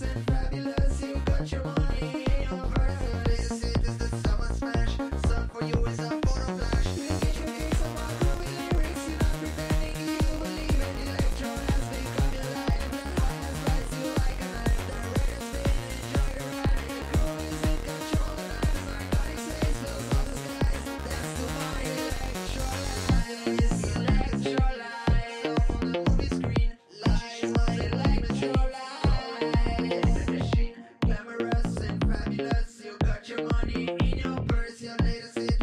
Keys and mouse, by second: 2.5-5.2 drag, 6.7 a, 10.2-11.6 drag, 15.5 a, 18.0-20.6 drag, 23.1 a, 24.5-26.2 drag, 26.4-27.8 drag, 27.9 a, 32.5-33.9 drag, 34.0-35.3 drag, 35.5 a.